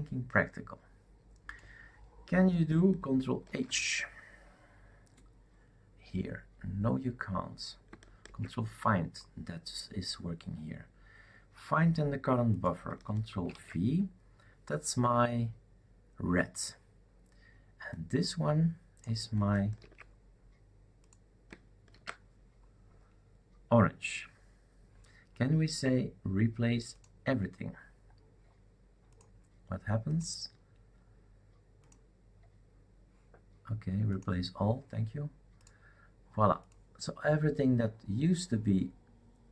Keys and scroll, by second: 3.4 ctrl+h, 8.2 ctrl+f, 13.4 ctrl+v, 19.8 ctrl+c, 21.9 ctrl+v.